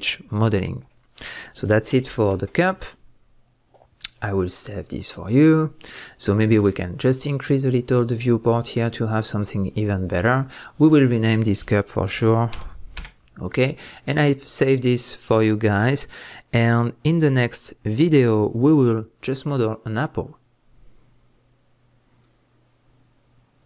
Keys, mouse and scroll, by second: 3.1 scroll down 1, 3.4-3.7 scroll up 1, 3.7 middle click, 7.3 click, 8.1-10.7 middle drag, 10.7 click, 10.9-14.2 drag.